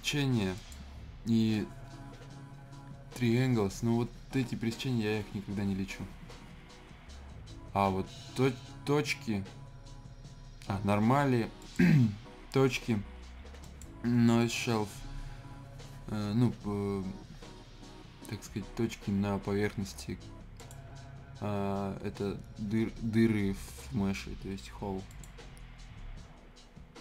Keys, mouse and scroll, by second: 11.6 click, 20.5 click, 25.1 click.